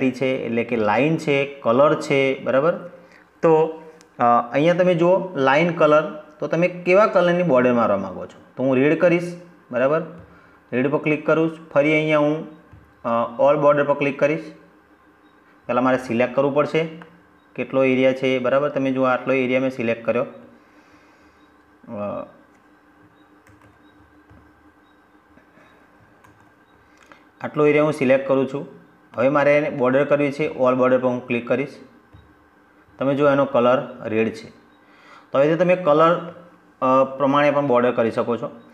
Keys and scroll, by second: 22.3 ctrl+s, 25.1 ctrl+z.